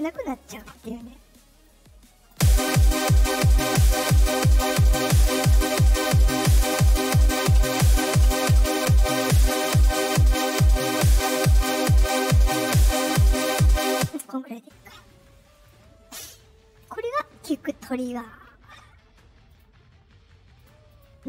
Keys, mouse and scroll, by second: 1.6-2.2 drag, 2.2 space, 2.7-4.1 drag, 5.1 right click, 6.0 click, 11.6-12.9 drag, 13.7 click, 13.9 space, 15.5 click, 19.4 click, 20.5 click, 20.8 click.